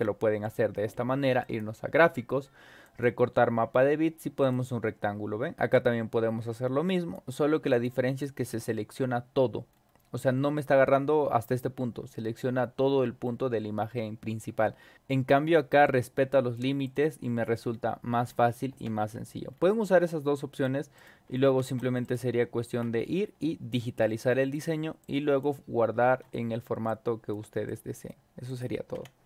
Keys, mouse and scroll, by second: 1.4 click, 2.8 click, 4.4 click, 5.7-7.1 drag, 7.7 click, 8.2 drag, 9.7 scroll up 2, 10.3 scroll up 2, 12.8-13.4 scroll down 4, 13.8 scroll up 2, 14.4 scroll up 2, 14.9 click, 15.8 click, 16.8 click, 17.2-17.8 scroll down 4, 18.7 0, 19.5 scroll down 2, 20.0-20.6 drag, 20.9 click, 21.5 ctrl+v, 22.0 click, 22.6 ctrl+v, 23.0 scroll down 2, 23.7-24.5 drag, 25.0 click, 26.8 shift+click, 27.6 click, 28.4 click, 28.9 0.